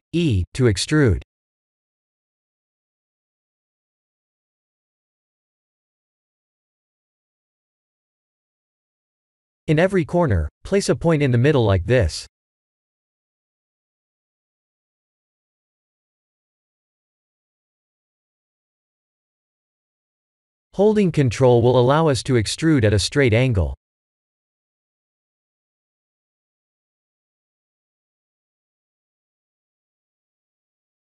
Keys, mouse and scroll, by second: 2.3 e, 5.4 ctrl+click, 6.7-7.6 alt+shift+middle drag, 8.4-9.1 alt+shift+middle drag, 9.8 e, 11.1 click, 11.3 e, 12.7 click, 13.3 e, 15.0 ctrl+click, 15.4 e, 16.6 click, 17.0 e, 19.6 click, 21.6 e, 23.8 ctrl+click, 24.9 e, 26.1 click, 26.3 e, 27.3 click, 27.6 e, 30.9 ctrl+click.